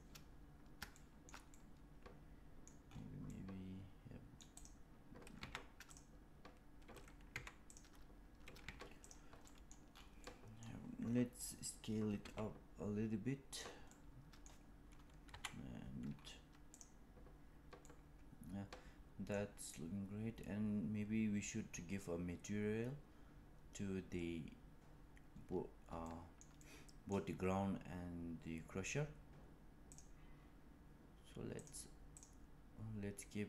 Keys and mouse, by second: 0.9-1.2 shift+middle drag, 1.4-2.6 middle drag, 3.2-4.3 middle drag, 4.5 click, 5.3 Tab, 5.8 click, 7.2 3, 8.5 Tab, 9.4 middle drag, 10.2 middle click, 12.1 s, 13.8-14.4 middle drag, 15.3 KP_1, 16.7 click, 17.7-19.3 middle drag, 26.1-26.5 shift+middle drag, 26.6-27.1 middle drag, 29.8 click, 32.1 click.